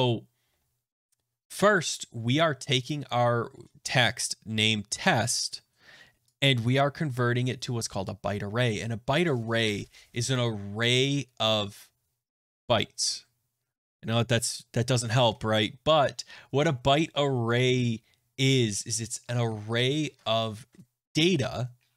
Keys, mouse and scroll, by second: 2.3 click, 2.8 click, 5.0 click, 7.6 click, 9.6 click.